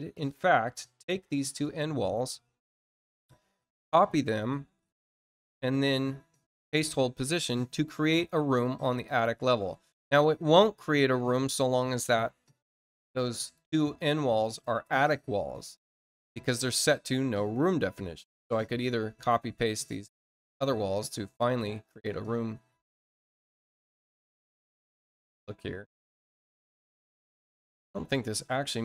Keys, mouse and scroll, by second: 0.1 click, 1.0 shift+click, 4.1 click, 8.0 click, 8.8 click, 12.0 click, 13.3 click, 14.4 shift+click, 16.5 click, 21.2 click, 21.8 click, 22.8 click, 24.0 shift+click, 25.4 shift+click, 26.9 shift+click.